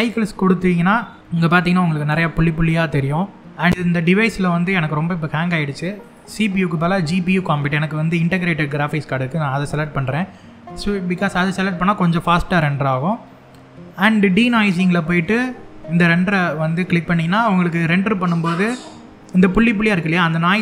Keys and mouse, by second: 5.9-8.5 drag, 14.2 click, 16.0 click.